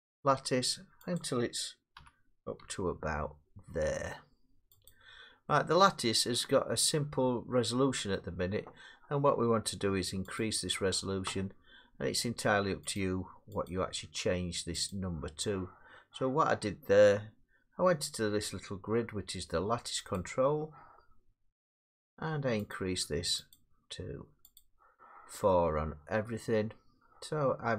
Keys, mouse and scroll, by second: 1.2 click, 2.0 g, 2.6 z, 4.9 click, 8.1 middle click, 10.4 click, 13.0 click, 13.7 click, 14.9 click, 20.2 click, 22.8 click, 23.5 click, 24.6 click.